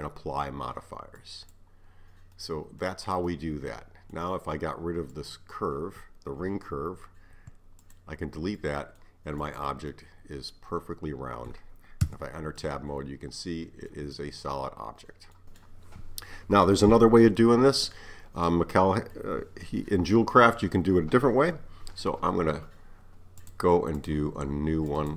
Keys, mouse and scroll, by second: 2.4-5.1 middle drag, 5.1 click, 7.4 x, 8.6-9.4 middle drag, 9.4 click, 9.9-12.1 middle drag, 12.1 Tab, 12.6-20.9 middle drag, 23.4-25.1 drag.